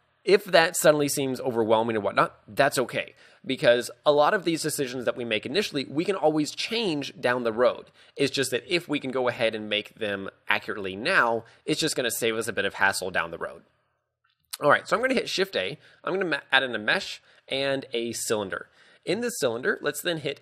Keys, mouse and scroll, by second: 5.1 d, 5.2 right click, 8.7 d, 15.2 shift+a.